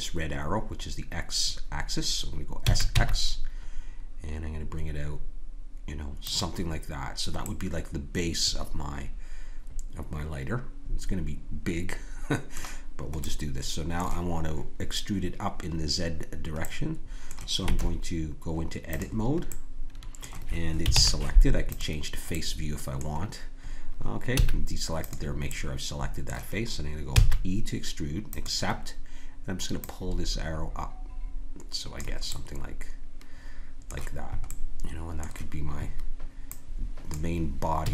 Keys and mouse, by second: 2.6 s, 7.4-9.7 middle drag, 13.2 middle click, 17.7 Tab, 20.9 ctrl+Tab, 22.3-24.1 drag, 24.3 a, 25.0 click, 27.1 e, 30.7-31.9 drag, 32.3-37.1 drag, 37.8 a.